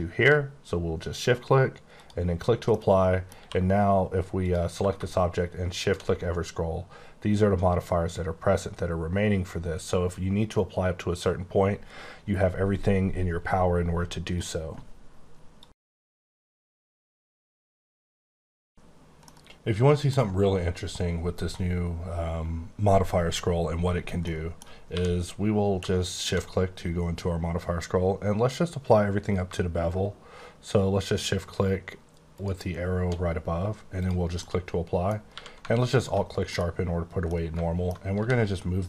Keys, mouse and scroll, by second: 0.3 click, 1.9 click, 2.7 middle click, 3.3 q, 4.4 click, 4.7 q, 5.7 shift+click, 6.2-6.9 scroll up 7, 7.1-7.6 scroll down 10, 7.8-8.1 scroll up 7, 8.3 scroll down 1, 8.5-9.1 scroll up 8, 9.1-9.4 scroll down 8, 9.4-11.5 scroll up 6, 14.2 right click, 24.2 middle click, 24.2 middle click, 24.9 q, 25.7 shift+q, 26.1 shift+click, 26.7 scroll, 26.8-28.5 scroll up 16, 32.3 click, 34.3 middle click, 35.3 q, 35.9 click, 36.5 middle click, 37.2 middle click, 38.1 g.